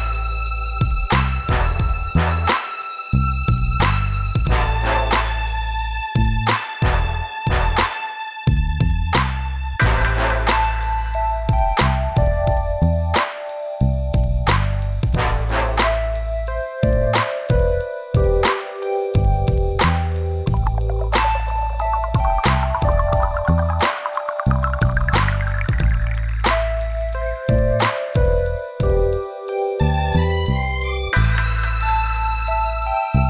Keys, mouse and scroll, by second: 12.4 click, 15.5 click, 15.6 click, 18.8 b, 18.9 click, 19.0 click, 21.1 click, 21.2 click, 22.0 click, 27.5 click, 30.1 click.